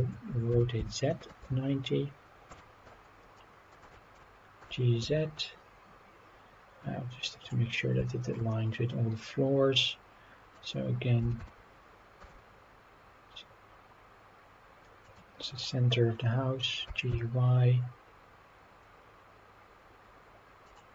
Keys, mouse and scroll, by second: 0.5 r, 0.7 z, 1.3 KP_9, 1.5 KP_0, 2.5 Return, 3.3-3.7 middle drag, 3.9 shift+middle drag, 4.6 g, 5.0 z, 7.4 click, 7.7 scroll down 1, 8.1 shift+middle drag, 8.5-10.5 middle drag, 11.2 g, 11.4 y, 15.0-15.5 drag, 15.5 scroll up 1, 15.6 middle drag, 16.0-16.5 scroll up 3, 16.8 g, 17.1 y, 20.6 click.